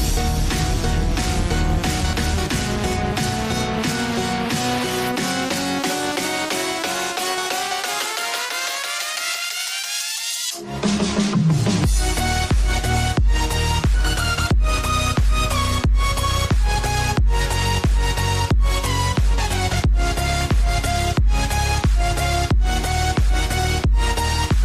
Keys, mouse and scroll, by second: 0.3 ctrl+z, 4.3 Tab, 4.7-5.6 scroll down 2, 5.6 click, 6.5 click, 7.6-8.8 scroll down 2, 8.8-10.5 drag, 11.6-12.7 drag, 12.7 scroll up 1, 13.7 click, 14.3 scroll up 1, 15.7 click, 18.4 click, 19.5 click, 19.9 click, 20.6 click, 23.1 click, 24.4 click.